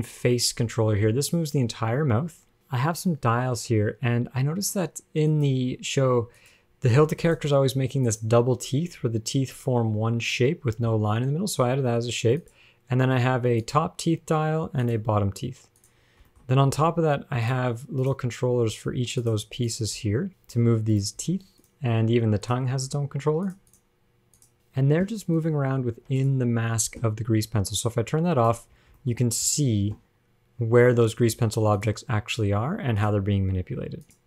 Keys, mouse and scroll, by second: 1.3 g, 5.5 click, 6.6 click, 7.4 click, 8.3 click, 12.7 click, 13.8 click, 15.1 click, 16.0 click, 16.5 shift+middle click, 17.7 click, 18.3 click, 18.8 g, 19.9 click, 20.2-21.5 typing, 22.7 click, 22.9 g, 23.9 click, 24.5 click, 24.5 g, 26.2 ctrl+Tab, 26.4 click, 28.0 click, 28.9 scroll down 3, 29.2 shift+middle click, 29.3-29.7 scroll up 3, 29.7 shift+middle click, 32.0 click, 33.2 click.